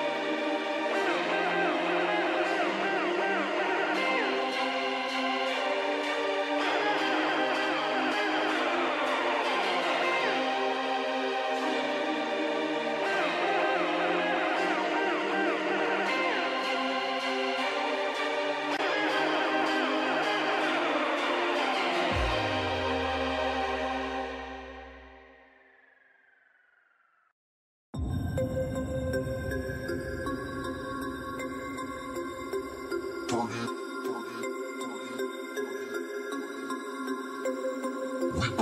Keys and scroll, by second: 3.8 space, 36.1 ctrl+space.